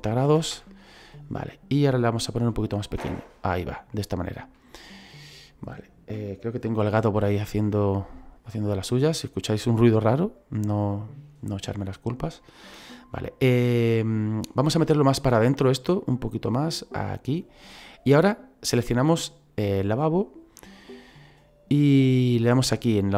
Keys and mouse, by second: 0.1 KP_9, 0.2 KP_0, 0.5 Return, 2.4 s, 3.4 click, 3.9 middle click, 4.7 shift+middle click, 7.7 shift+middle click, 9.4 click, 11.5 click, 12.3 middle click, 14.5 middle click, 15.0 shift+middle click, 16.0 click, 19.0 right click.